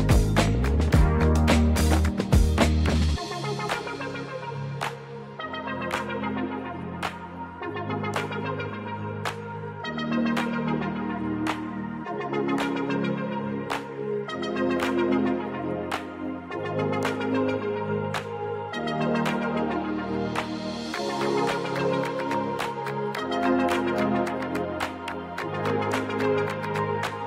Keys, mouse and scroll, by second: 1.7 click, 5.4 click.